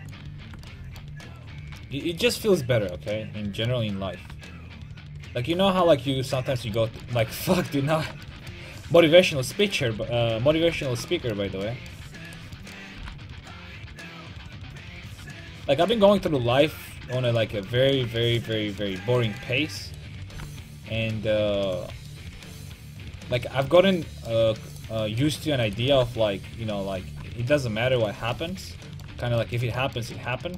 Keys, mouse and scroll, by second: 0.5 ctrl+z, 3.6 click, 3.8 right click, 4.2-6.2 drag, 5.7 a, 6.5 middle click, 9.7 right click, 10.1 ctrl+x, 10.5 right click, 10.5 a, 10.7 ctrl+t, 10.9 a, 11.4 middle click, 13.1 g, 14.8-15.9 drag, 15.0 a, 15.9 right click, 16.3 g, 17.4 right click, 17.6 a, 20.0 right click, 20.4 g, 21.0 right click, 21.8-23.5 drag, 21.9 a, 23.5 middle click, 24.8-28.1 right drag, 26.0 g, 28.3 a, 28.4 middle click.